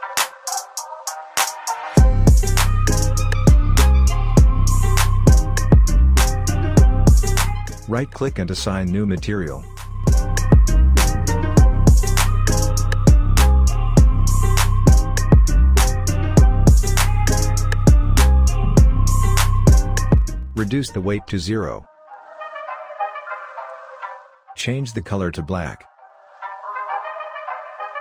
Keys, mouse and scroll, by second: 3.4-7.6 right drag, 7.6 click, 12.0 ctrl+a, 13.0-15.5 typing, 16.7-17.5 scroll up 1, 17.5-28.0 drag.